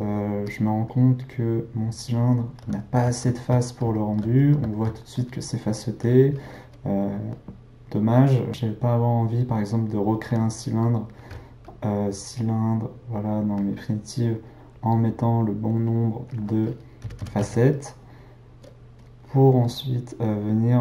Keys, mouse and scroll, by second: 0.5 click, 0.9-8.0 middle drag, 11.1 shift+a, 14.7-19.0 drag, 19.6 click.